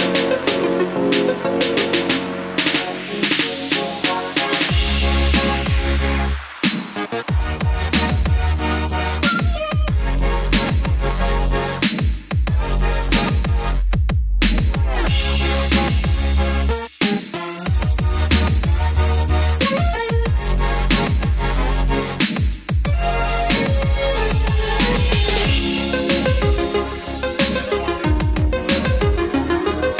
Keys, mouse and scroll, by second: 1.7-3.0 drag, 5.1-7.6 typing, 9.2-21.3 drag, 21.7-26.2 typing, 29.4-29.9 drag.